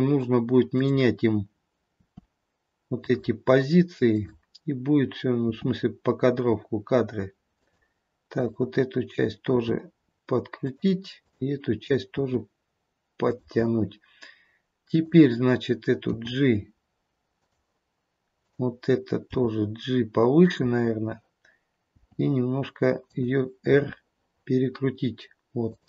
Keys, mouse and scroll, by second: 0.6 click, 2.0 r, 4.0 click, 5.4 r, 8.3 click, 9.6 r, 11.3 click, 12.1 r, 14.9 click, 16.2 g, 18.3 click, 19.1 g, 21.9 g, 23.7 r.